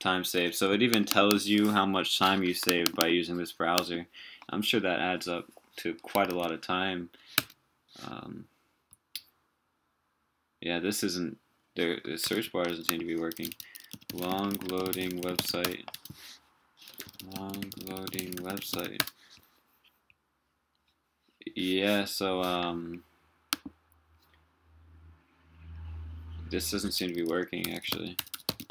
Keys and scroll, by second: 6.3 super+w, 12.3 super+t.